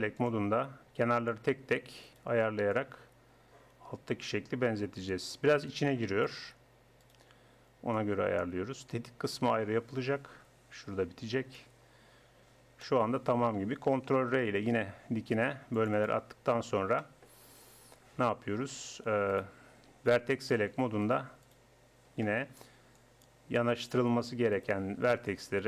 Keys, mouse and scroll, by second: 2.0-4.4 right drag, 6.2 middle click, 7.0-8.8 right drag, 8.0-11.6 drag, 11.6-12.8 middle drag, 12.8-14.2 drag, 14.2 ctrl+r, 17.8-19.3 drag, 19.3-20.4 right drag, 22.3-24.6 drag, 24.9 right click.